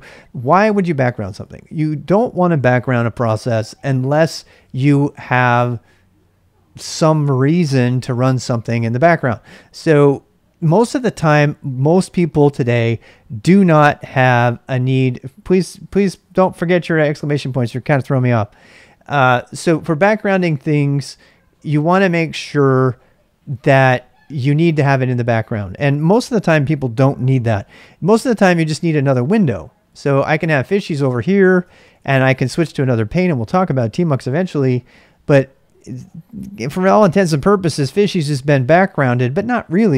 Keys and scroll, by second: 27.6 ctrl+a, 28.4 typing, 29.6-31.2 typing.